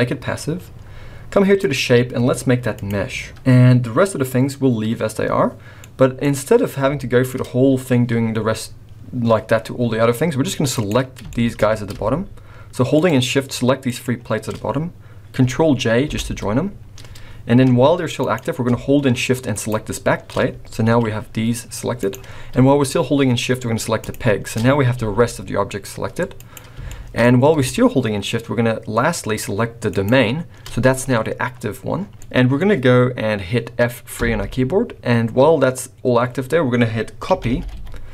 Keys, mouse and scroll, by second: 1.6 click, 5.8 middle click, 6.0 middle click, 7.0 shift+middle click, 7.4 scroll up 1, 10.7 click, 11.3 shift+middle click, 11.9 scroll up 3, 13.0 shift+click, 14.1 shift+click, 16.1 ctrl+j, 17.7 g, 19.5 shift+click, 20.3-20.9 scroll down 4, 20.9 g, 22.2 scroll up 2, 24.0 shift+click, 24.5-25.3 scroll down 3, 25.0 g, 26.9 shift+middle click, 27.2 scroll up 3, 29.8 shift+click, 31.9 scroll down 5, 34.2 F3, 34.2 middle click.